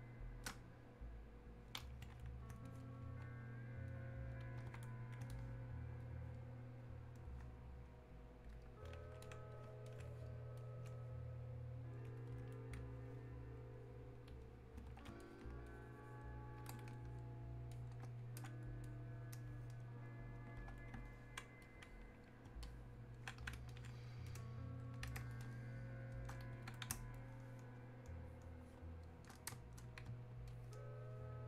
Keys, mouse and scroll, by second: 0.1 space, 0.9-2.7 drag, 4.0-6.1 drag, 6.1-21.7 ctrl+drag, 21.7-27.2 ctrl+drag, 27.2-30.5 ctrl+drag, 30.5-31.4 ctrl+drag.